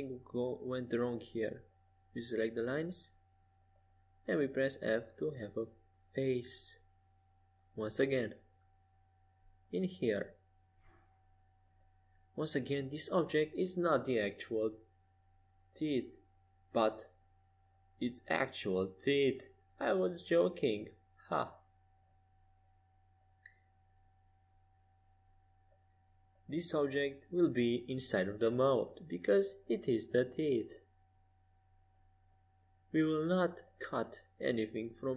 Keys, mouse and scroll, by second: 0.9 a, 1.5 a, 1.9 a, 2.4-3.7 right drag, 3.7-6.7 middle drag, 5.4 f, 8.4-9.4 right drag, 8.7-15.8 middle drag, 14.2 f, 17.5 middle click, 18.1 Tab, 18.6 z, 24.6 KP_5, 25.8 KP_1, 26.6 KP_3, 28.2 z, 30.0 z, 31.0-32.9 drag, 34.9 ctrl+alt+shift+c.